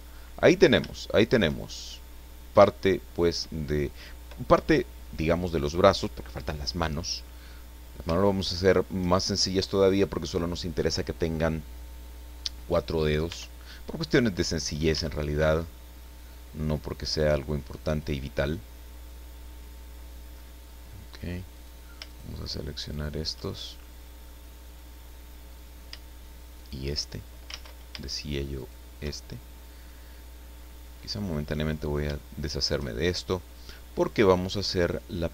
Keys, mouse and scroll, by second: 0.9 shift+middle click, 1.6-2.1 shift+scroll up 2, 1.9 middle click, 2.2-2.5 scroll down 1, 2.7 shift+middle click, 3.7 shift+scroll up 1, 7.7 scroll down 1, 8.3 shift+middle click, 9.2 shift+scroll up 2, 9.7 right click, 13.3 Tab, 14.2-14.5 scroll up 1, 14.9 a, 15.3 click, 17.8 click, 19.4 click, 20.6 scroll up 1, 21.5 right click, 22.1 shift+right click, 22.8 shift+right click, 23.5 shift+scroll down 1, 23.8 middle click, 24.7 middle click, 26.5 shift+right click, 27.0 shift+scroll down 2, 27.5 ctrl+z, 28.5 shift+right click, 29.3 shift+middle click, 31.2 click, 31.7 scroll down 1, 32.1 shift+middle click, 32.9-33.3 shift+scroll up 3, 33.6 scroll down 1, 33.9-35.0 middle drag.